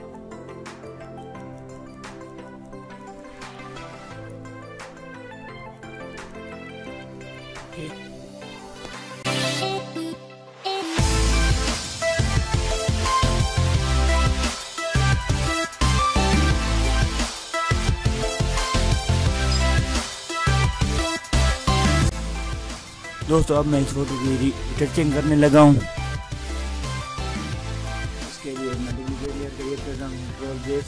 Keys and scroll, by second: 10.0 ctrl+-, 11.4 ctrl+-, 12.5 ctrl+alt+z.